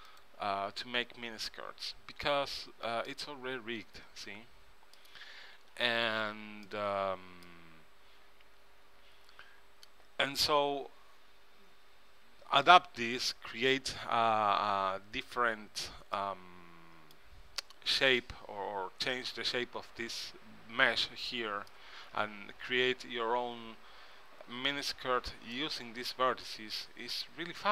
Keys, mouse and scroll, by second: 0.2-2.0 right drag, 2.7 ctrl+Tab, 5.6 ctrl+Tab, 16.3-18.1 middle drag, 19.7-21.2 middle drag, 21.8-23.7 middle drag, 25.7-27.3 middle drag.